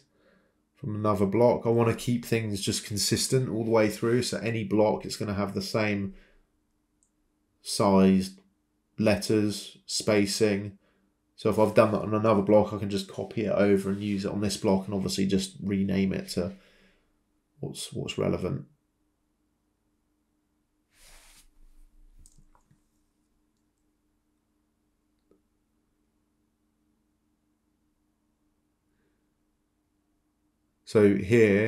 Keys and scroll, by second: 16.2 h, 17.3 1, 24.1-28.1 typing.